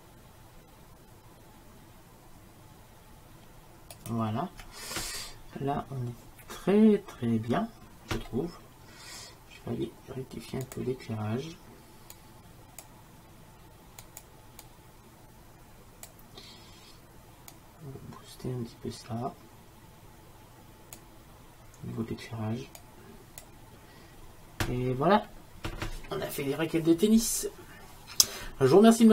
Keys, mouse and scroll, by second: 10.7-13.5 drag, 18.4 click, 19.1 click, 22.9-24.6 drag, 23.2 middle click.